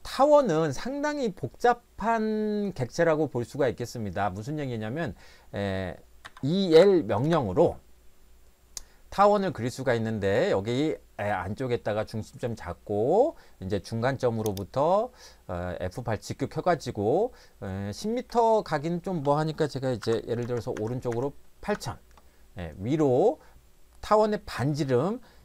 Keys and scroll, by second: 6.3 e, 6.7 l, 7.2 Return, 19.8-21.6 typing, 21.7 Return.